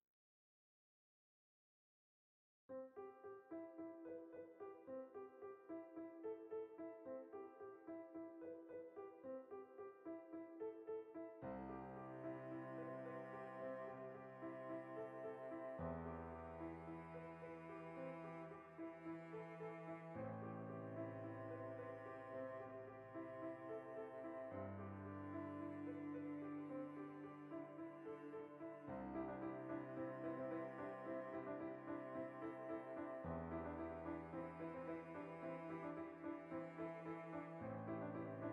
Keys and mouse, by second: 1.1 alt+q, 2.0-5.7 alt+shift+right drag, 5.7-10.0 middle drag, 7.1 ctrl+b, 10.0 shift+click, 10.2-12.1 ctrl+middle drag, 10.5 alt+e, 12.1 shift+click, 12.2-13.8 ctrl+middle drag, 13.2 i, 13.8-14.9 drag, 14.0 ctrl+z, 14.9-16.4 shift+middle drag, 15.2 ctrl+z, 15.6 ctrl+b, 16.4 click, 16.9 alt+e, 18.1 shift+click, 18.4 i, 19.1 click, 19.2-23.6 ctrl+middle drag, 19.5 Tab, 20.7 Tab, 21.1 ctrl+z, 22.4 ctrl+b, 23.6 click, 24.6-27.5 ctrl+middle drag, 25.6 ctrl+z, 27.8 click, 28.5 ctrl+z, 29.0 click, 29.6 ctrl+b, 30.6 shift+click, 31.8 alt+e, 33.0 shift+click, 33.5-35.1 shift+middle drag, 34.2 i, 35.1 shift+click, 35.2 middle click, 36.1 right click, 36.3 l, 37.4 h, 37.6-38.5 shift+middle drag.